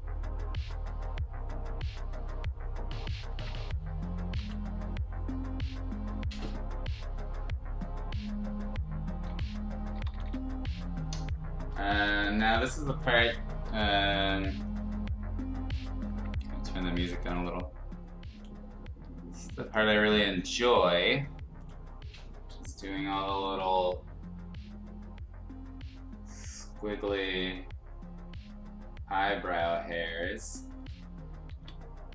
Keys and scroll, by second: 4.3 x, 9.2-10.5 typing, 12.8 ctrl+z, 13.6 [, 13.8 [, 31.5 ctrl+z.